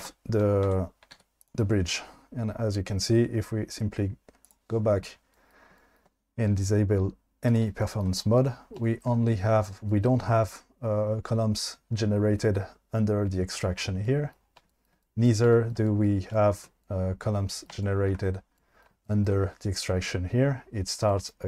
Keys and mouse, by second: 0.7 Tab, 1.1 q, 4.8-5.2 drag, 7.5 drag.